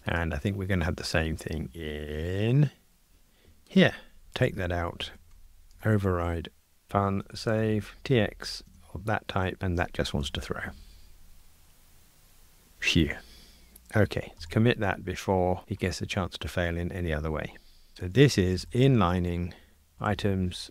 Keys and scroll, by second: 4.4 super+BackSpace, 6.8 Return, 8.7 Tab, 10.2 ctrl+r, 14.4 super+k.